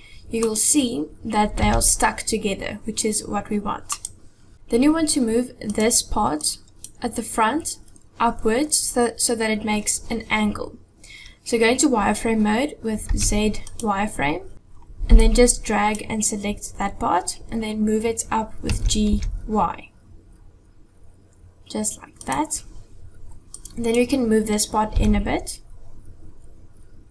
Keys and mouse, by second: 1.6 g, 5.7 click, 6.4 click, 13.0 z, 15.1 click, 18.6 g, 23.5 click, 25.0 g.